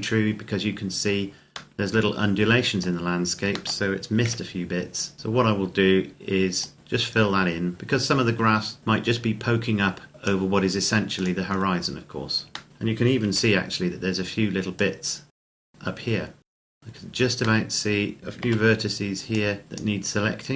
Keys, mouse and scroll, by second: 1.6 middle click, 4.1 KP_7, 5.1-6.2 scroll up 1, 6.4 click, 11.0 right click, 11.3-12.3 scroll down 1, 12.5 shift+middle click, 13.2 c, 13.7-14.6 scroll up 1, 14.6 click, 15.4 ctrl+z, 15.5 click, 15.6 middle click, 16.5 right click, 16.6 KP_0, 17.4 middle click, 18.4 c, 19.1 click.